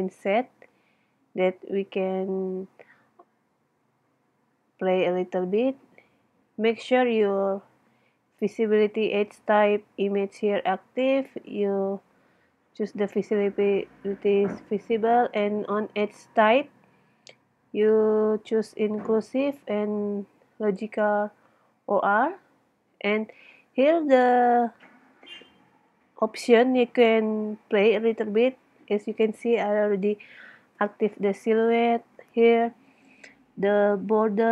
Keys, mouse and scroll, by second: 2.1-4.6 middle drag, 5.9 middle click, 6.7 middle click, 7.5-8.6 middle drag, 9.1 middle click, 9.6 middle click, 12.3 middle click, 12.8-18.2 middle drag, 19.8-22.2 middle drag, 23.0-25.4 middle drag, 25.9 middle click, 28.6 middle click.